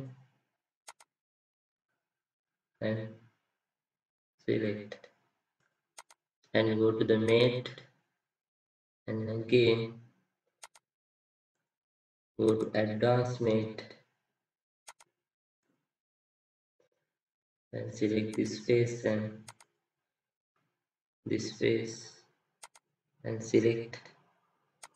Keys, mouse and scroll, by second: 16.4 right click, 16.8 middle click, 17.3-18.9 scroll up 1.